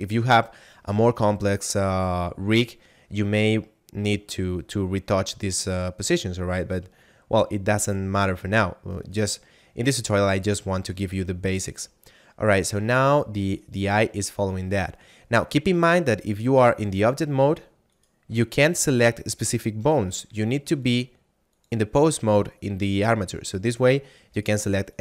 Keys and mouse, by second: 8.9 right click, 12.9 right click, 16.2 click, 17.9 right click, 18.7 shift+right click, 20.8 click, 23.6 right click.